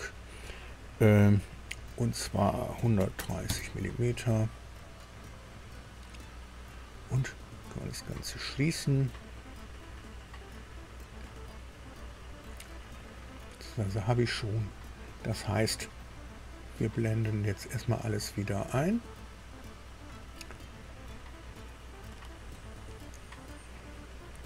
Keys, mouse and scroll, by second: 2.7 KP_1, 3.1 KP_3, 3.4 KP_Enter, 3.4 KP_0, 4.7-6.9 drag, 10.6-11.6 drag, 13.4 scroll up 1, 13.9 scroll down 1, 14.3 click, 15.5 click, 16.9-18.4 scroll up 5, 18.7-19.1 scroll up 2, 19.1-19.5 scroll down 2, 20.9-21.4 scroll up 2, 22.0-22.3 scroll up 2.